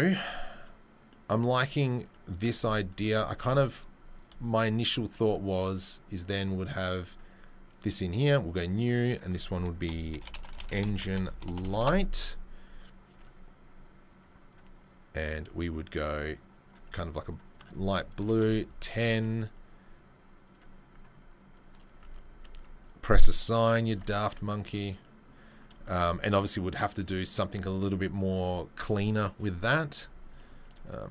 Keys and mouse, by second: 2.6 Tab, 3.3 Tab, 6.0 click, 6.1-7.0 middle drag, 7.0-9.9 drag, 9.9 shift+right click, 10.3 click, 10.9 shift+right click, 11.2-15.5 drag, 15.5-17.2 middle drag, 17.2 click, 17.3 middle click, 17.5-21.2 drag, 21.2-23.4 middle drag, 22.4 Tab, 23.4 click, 24.1-31.1 middle drag.